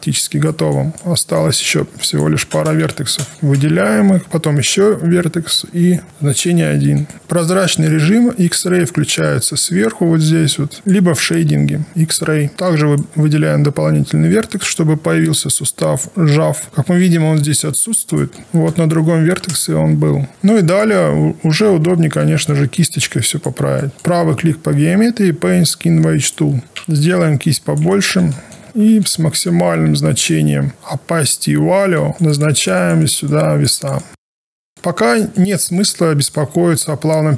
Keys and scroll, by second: 1.6 1, 2.9 q, 6.2 Return, 20.3 alt+1, 21.6 alt+2, 26.8 b.